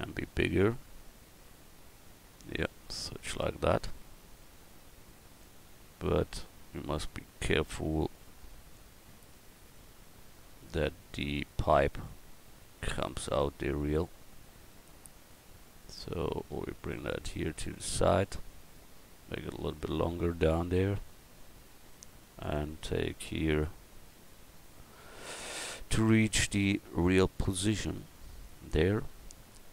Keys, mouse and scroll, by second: 2.4 s, 3.0 middle click, 12.0-13.1 middle drag, 13.8-15.3 middle drag, 16.0-17.6 drag, 20.8 middle click, 21.0 middle click.